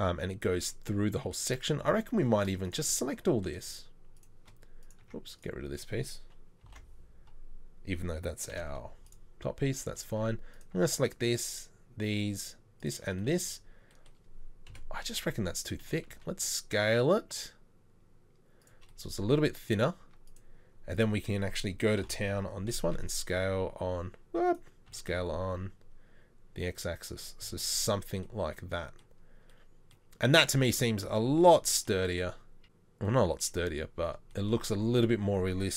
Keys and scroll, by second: 5.1 Tab, 6.7 ctrl+l, 8.6 Delete, 10.1 Tab, 14.7 KP_7, 15.9 s, 20.1 Tab, 22.1 ctrl+l, 22.8 s, 24.9 s, 34.7 Tab.